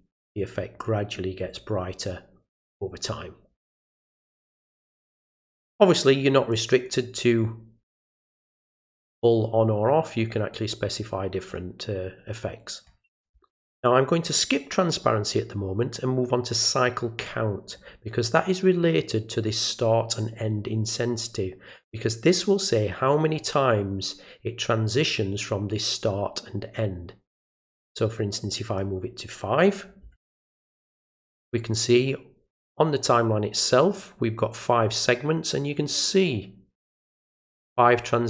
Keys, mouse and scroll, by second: 6.5-11.5 drag, 28.5 click.